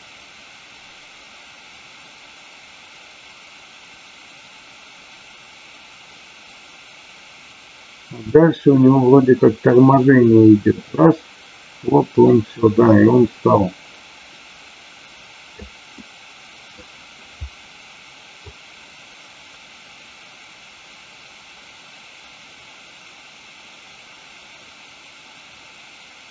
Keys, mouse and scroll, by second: 15.8-16.7 middle drag, 18.4-26.3 drag.